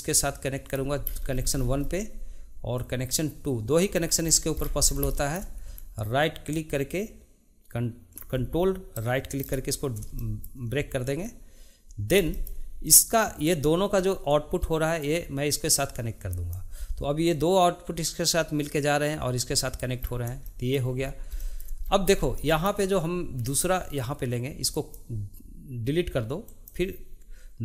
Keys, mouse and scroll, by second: 1.1-2.7 scroll up 11, 2.7 drag, 4.3 scroll down 2, 5.1-8.1 shift+middle drag, 8.9 ctrl+right click, 10.2-11.2 shift+middle drag, 11.2 click, 12.3 shift+middle click, 12.9 click, 15.0-18.0 drag, 20.0-20.4 scroll down 2, 20.4-21.1 shift+middle drag, 21.1 scroll up 2, 21.4-21.9 shift+middle drag, 21.9-22.5 scroll up 4, 22.5-24.7 shift+middle drag, 24.7 click, 26.5 click.